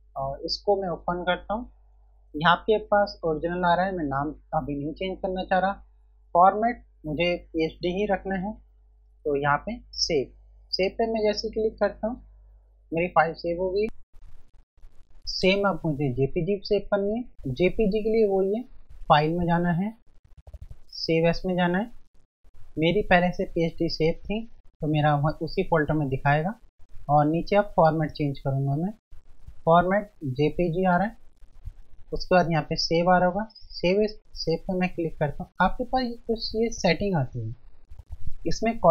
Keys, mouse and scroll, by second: 2.0 F1, 10.6 click, 10.9 F1, 19.1 click, 21.0 click, 22.0 F1, 26.4 F1, 28.5 click, 34.2 click.